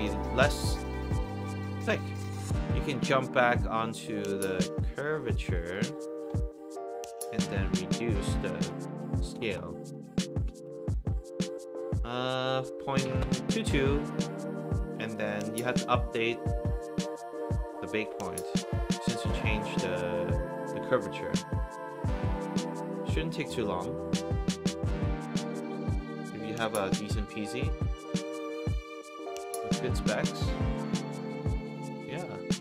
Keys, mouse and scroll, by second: 0.5 middle drag, 0.8 middle click, 0.9 scroll up 1, 1.0 middle click, 1.8 middle click, 5.4 click, 5.6 click, 7.0 click, 9.3 BackSpace, 10.6 Return, 11.9 click, 13.0 KP_2, 13.2 Return, 15.1 click, 15.2 click, 16.9 drag, 21.9 click, 29.1 alt+click, 31.3 click.